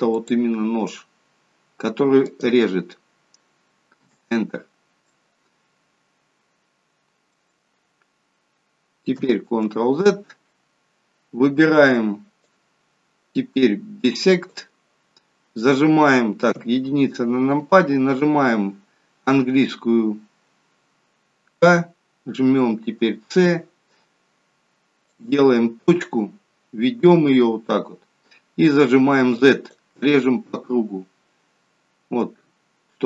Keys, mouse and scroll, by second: 0.1 click, 5.0 middle click, 9.4 ctrl+z, 12.4 click, 13.4 click, 14.5 click, 16.6 KP_1, 21.6 k.